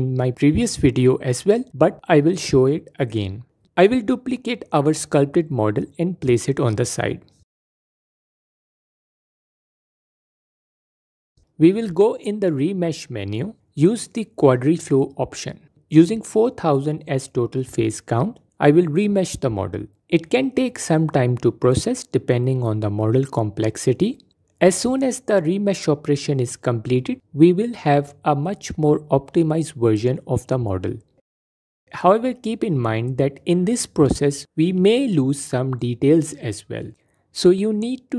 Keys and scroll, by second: 6.2 shift+d, 9.7 F4, 29.8 F4, 36.8 F4.